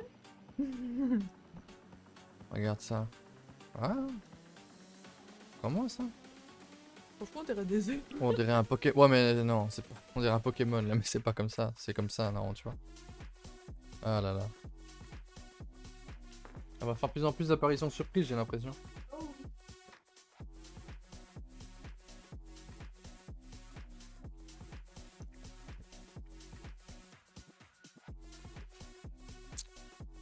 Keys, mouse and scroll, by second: 0.3-1.6 typing, 2.3 scroll down 2, 2.9 alt+h, 3.1 scroll down 4, 3.4 shift+middle drag, 3.6 scroll up 1, 3.7 a, 3.8 a, 3.8-4.4 scroll down 4, 4.4-4.7 middle drag, 4.7-5.2 scroll down 1, 5.2-5.8 shift+middle drag, 5.8-6.3 scroll up 2, 6.5 scroll, 7.2-7.5 shift+middle drag, 7.5 scroll up 2, 8.1-9.3 shift+middle drag, 9.3 click, 11.6 click, 11.9 h, 12.5-13.4 scroll down 1, 13.4 click, 13.6 h, 14.4 click, 30.1 Tab.